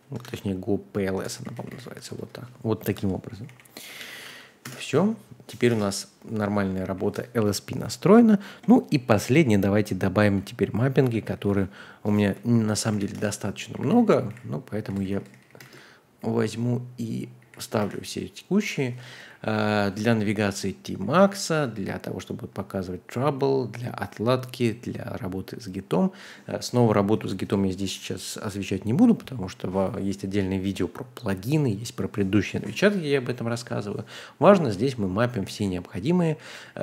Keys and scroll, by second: 0.0-6.9 typing, 11.0 super+a, 11.3 super+c, 12.6-18.7 typing, 13.1 Return, 19.2 ctrl+d, 20.0 ctrl+u, 20.8 ctrl+d, 23.0 ctrl+d, 24.9 ctrl+d, 33.0-33.4 typing, 34.2 ctrl+d, 34.6 ctrl+d, 35.4 ctrl+u, 35.6 ctrl+u, 36.5 ctrl+u.